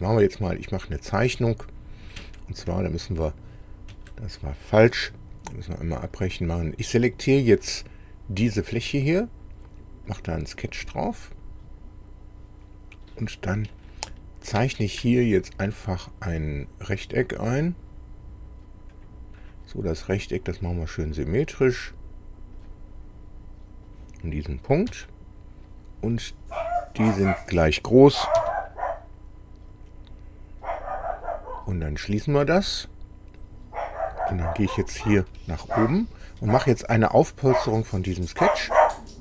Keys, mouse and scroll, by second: 0.5 click, 2.2 Escape, 3.9 Escape, 6.2 click, 7.7 click, 10.2 click, 13.5 scroll down 1, 13.9 shift+click, 16.4 click, 17.6 click, 19.0 click, 19.5 click, 21.1 click, 22.6 click, 23.9 click, 24.9 s, 26.5 click, 27.4 click, 28.4 e, 29.8-31.1 drag, 31.9 click, 34.3 middle click, 35.2-36.6 middle drag.